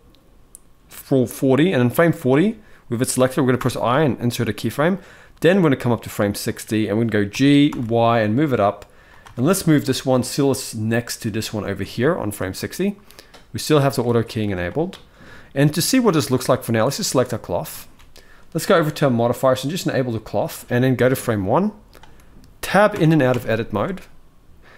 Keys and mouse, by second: 3.3 i, 4.7-6.2 drag, 7.0 g, 9.0 shift+middle drag, 9.5 middle click, 11.7 shift+middle drag, 12.5 middle click, 13.7-14.1 shift+middle drag, 16.6 click, 17.5 ctrl+s, 19.7 click, 20.7-21.6 drag, 22.7 Tab, 23.0 Tab.